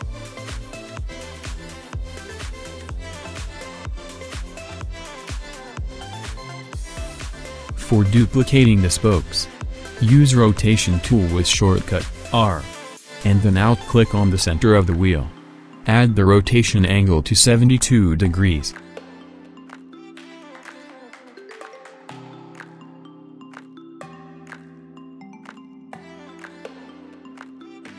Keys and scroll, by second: 2.0 KP_6, 2.4 Return, 3.6 8, 4.0 Return, 11.7 r, 14.1 7, 14.4 2, 15.5 ctrl+d, 15.8 ctrl+d, 16.0 ctrl+d, 16.7 b, 17.5 ctrl+z, 17.9 ctrl+v, 22.0 ctrl+z.